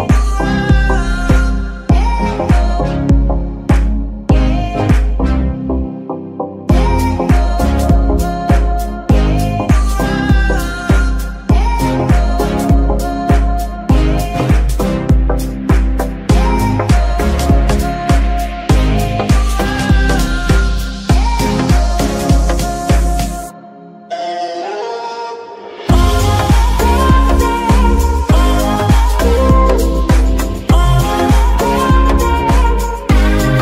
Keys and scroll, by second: 3.1 Tab, 3.7 a, 9.2 g, 10.5 Escape, 10.9 Tab, 13.5 shift+a, 23.5 KP_3, 25.3 g.